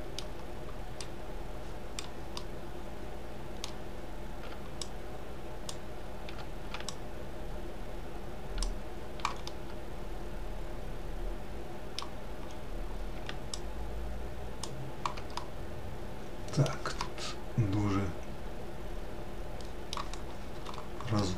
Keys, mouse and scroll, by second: 1.5-5.4 shift+middle drag, 5.4 shift+click, 8.4 shift+click, 9.4-12.2 middle drag, 12.2-12.9 scroll up 2, 14.4 shift+click, 15.2-19.7 middle drag, 21.0-21.3 middle drag.